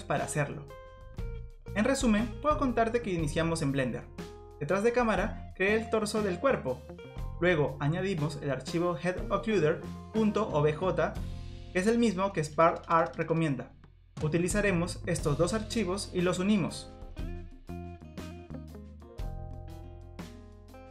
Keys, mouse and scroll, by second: 0.8 click, 1.9 click, 2.7 click, 5.6 click, 7.4 click, 8.5-8.9 scroll down 3, 8.9 middle click, 9.3-9.9 scroll up 2, 10.0 middle click, 11.9 click, 12.1 middle click, 12.1-12.4 scroll up 1, 14.3 shift+click, 15.8 ctrl+j, 16.3 click, 17.1 click, 17.3 scroll down 5, 17.3 scroll up 5, 17.6 click, 17.9 middle click, 18.0 scroll up 3, 18.1 click, 18.4 shift+click, 18.5 shift+click, 18.6-20.9 typing, 18.7 click, 18.9 shift+click, 18.9 shift+click, 19.1 shift+click, 19.1 shift+click, 19.2 shift+click, 19.2 click, 19.2 middle click, 19.2 scroll down 1, 19.3 click, 19.5 scroll up 4, 19.5 click, 19.6 shift+click, 19.6 shift+click, 19.6 shift+click, 19.7 shift+click, 19.7 shift+click, 19.7 shift+click, 19.8 shift+click, 19.8 click, 19.8 middle click, 19.8 scroll down 1, 19.9-20.9 scroll up 5, 19.9 click, 20.0 shift+click, 20.2 shift+click, 20.2 shift+click, 20.2 shift+click, 20.3 middle click, 20.4 shift+click, 20.6 click, 20.6 shift+click, 20.7 shift+click, 20.8 shift+click.